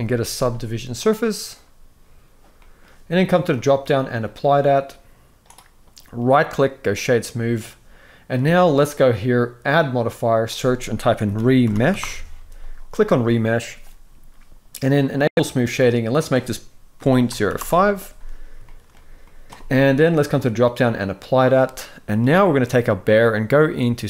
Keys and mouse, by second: 2.3 middle click, 3.3-4.8 drag, 6.0-6.8 right drag, 9.4-12.9 drag, 15.1-17.3 drag, 18.3 shift+middle drag, 18.9-19.4 middle drag, 20.2-20.7 drag, 21.5-21.8 middle drag.